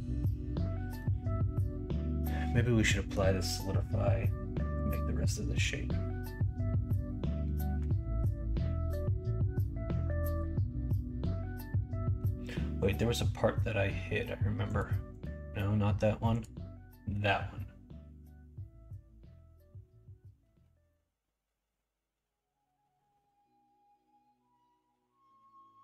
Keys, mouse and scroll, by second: 0.9-3.1 middle drag.